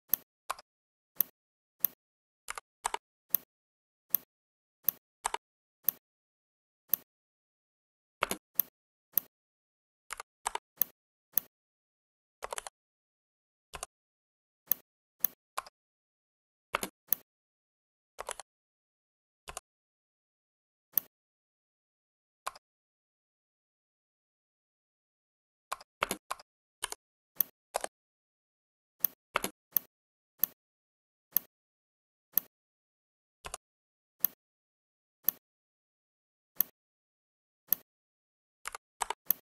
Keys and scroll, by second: 0.6 Escape, 12.6 ctrl+z, 15.5 Escape, 16.6 space, 18.3 ctrl+z, 22.3 Escape, 25.7 Escape, 25.9 space, 26.1 Escape, 29.2 space.